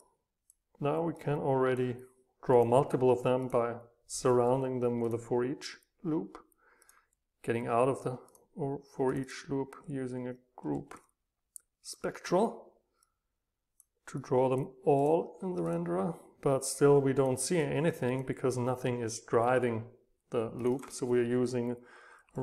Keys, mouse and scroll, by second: 1.1 click, 1.5-1.8 drag, 2.9-5.0 middle drag, 2.9-5.0 scroll up 2, 5.0-7.2 right drag, 8.3-11.4 right drag, 11.9-13.0 right drag, 13.0-17.6 drag, 17.6 right click, 17.9-20.2 drag, 20.8 double click.